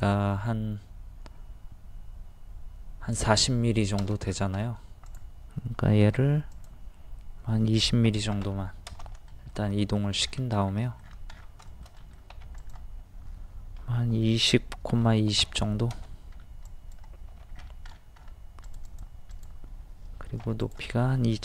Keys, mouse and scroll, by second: 4.2-4.6 scroll down 1, 5.1 click, 6.0 typing, 8.1 KP_2, 9.3 shift+middle click, 10.2-10.6 scroll up 1, 10.7-11.3 scroll down 2, 10.9 middle click, 11.9 middle click, 12.6 click, 13.8 KP_2, 14.0 KP_0, 15.1 KP_2, 15.1 KP_0, 16.4 scroll up 1, 16.6 click, 17.3 g, 17.5 scroll down 1, 17.6 scroll up 1, 18.6 click, 20.4 p, 20.6 click.